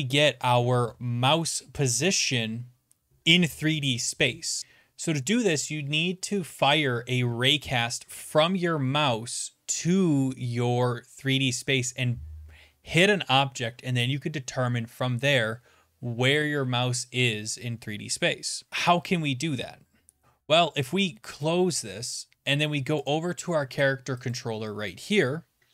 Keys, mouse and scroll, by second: 18.7 click, 21.5-23.1 drag.